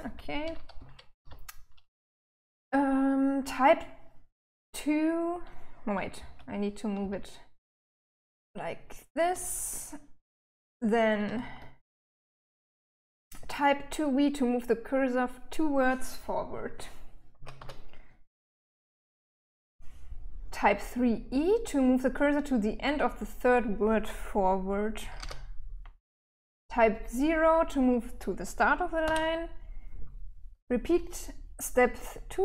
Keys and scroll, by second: 0.0-1.3 typing, 5.6-11.6 typing, 16.5-17.5 typing, 24.1-25.1 typing, 28.4 0.